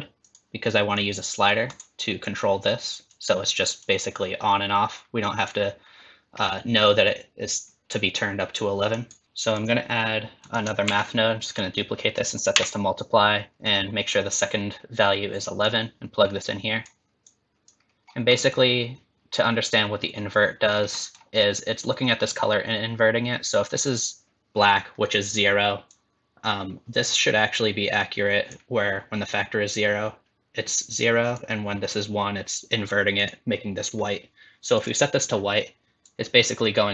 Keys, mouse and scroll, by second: 0.9 click, 3.1 click, 3.8 click, 6.4 scroll up 4, 8.9 click, 9.6 click, 10.4 click, 10.9 shift+d, 12.1 click, 15.6 click, 17.3 click, 18.1-18.4 scroll up 1, 18.4 middle click, 20.7 scroll up 4, 21.0 middle click, 25.9 click, 31.0 click, 33.2 click, 34.8 click.